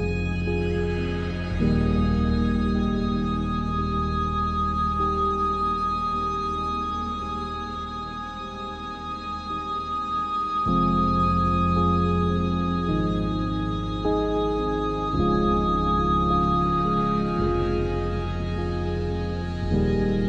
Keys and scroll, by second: 1.3 ctrl+r, 2.6 ctrl+r, 5.2 ctrl+r, 7.5 ctrl+r, 11.5 ctrl+e, 12.5 Tab, 13.8 ctrl+e, 14.3 Tab, 15.2 ctrl+r, 18.4 ctrl+b, 20.1 ctrl+z.